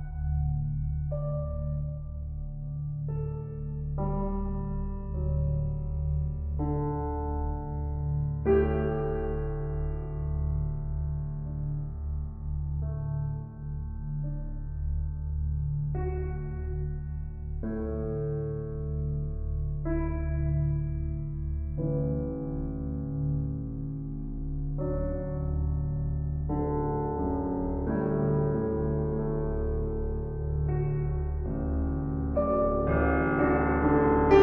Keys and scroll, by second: 10.4 ctrl+t, 27.9 ctrl+t.